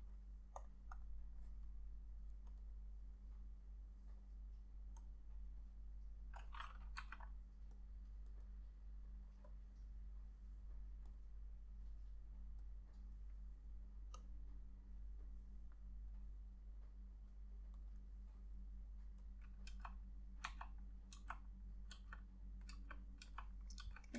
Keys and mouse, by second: 1.1 double click, 7.1 [, 8.6 double click, 18.0 double click, 20.6 ], 21.3 ], 22.8-24.1 typing.